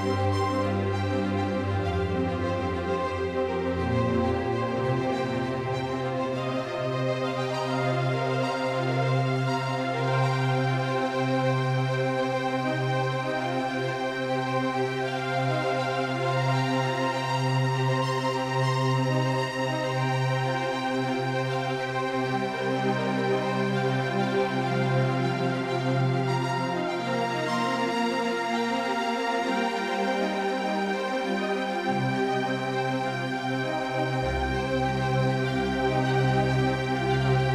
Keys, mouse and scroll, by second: 25.8-28.0 drag, 29.1-33.3 drag, 36.3-37.5 drag.